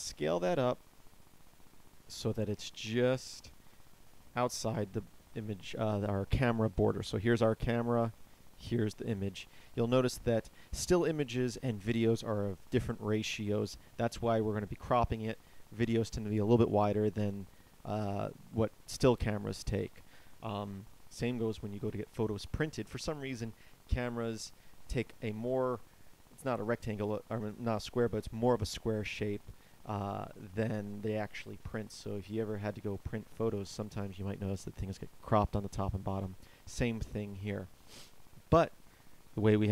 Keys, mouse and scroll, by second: 2.2 s, 7.8 click.